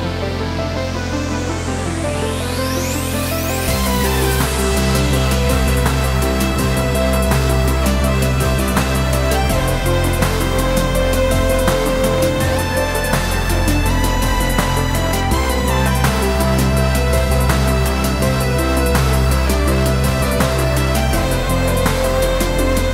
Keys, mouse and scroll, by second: 1.4 click, 1.7 g, 2.7 click, 3.1 g, 4.6 click, 4.9 s, 7.6 click, 8.1 s, 9.2 click, 9.7 KP_7, 10.3 shift+z, 10.5 scroll up 1, 11.2 g, 12.3 click, 12.7 s, 14.4 click, 14.7 shift+d, 16.3 click, 16.8 shift+d, 18.7 click, 19.3 g, 20.6 click, 20.8-22.5 middle drag, 21.2 scroll down 1, 21.8 shift+z, 22.5 click, 22.7 scroll up 1.